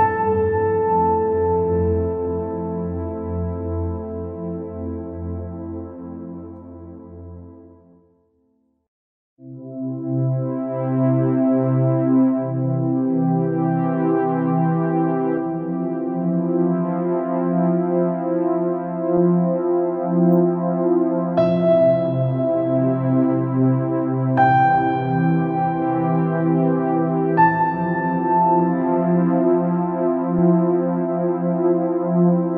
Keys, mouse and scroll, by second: 0.5-1.5 scroll down 2, 1.7 g, 6.3 click, 6.5 scroll down 3, 6.7 middle click, 7.1-7.7 scroll up 7, 8.1 scroll down 2, 8.9 click, 9.6 scroll up 2, 10.1 scroll down 3, 10.2 middle click, 11.0-11.5 scroll up 1, 11.5 scroll down 1, 11.6-12.9 middle drag, 12.9-13.7 scroll up 2, 14.2 g, 17.0 shift+d, 22.1 shift+d, 26.0 scroll down 3, 26.8 middle click, 27.6-28.0 scroll up 2, 28.0 middle click, 28.7-29.4 scroll up 1, 29.4 shift+d.